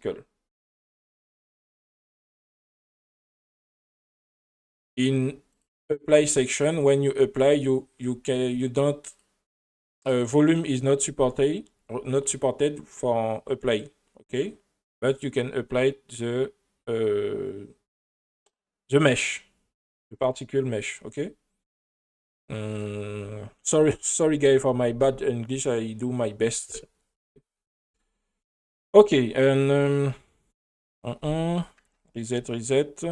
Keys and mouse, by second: 0.1-3.2 drag, 3.4 space, 4.9 drag, 5.5 click, 9.1 click, 22.7 click, 31.8 BackSpace, 32.3 BackSpace.